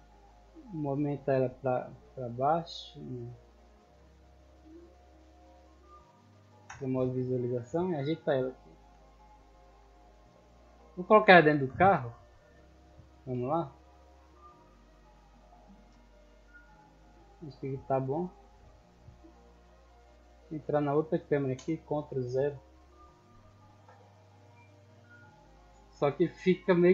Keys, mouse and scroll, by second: 1.7-2.8 drag, 3.3-4.0 drag, 4.2-4.6 middle drag, 5.3-5.9 drag, 7.6-8.7 typing, 10.3 click, 11.1 g, 11.5 x, 12.7 click, 13.1 g, 16.5 click, 17.8 middle drag, 17.8-18.8 scroll down 6, 20.0 right click, 20.6 right click, 22.6-26.9 typing.